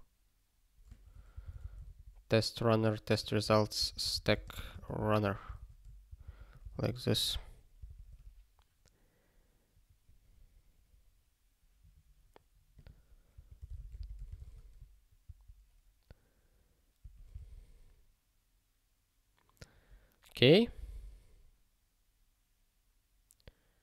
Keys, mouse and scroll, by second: 1.1 (, 1.9 alt+/, 3.2 -, 4.3 space, 4.5 u, 5.5 ctrl+s, 6.1 ctrl+n, 6.2 ctrl+n, 7.1 ctrl+p, 12.7 click, 13.3 -, 14.4 ctrl+s, 15.2 ctrl+n, 17.0 ctrl+a, 17.8 ctrl+s.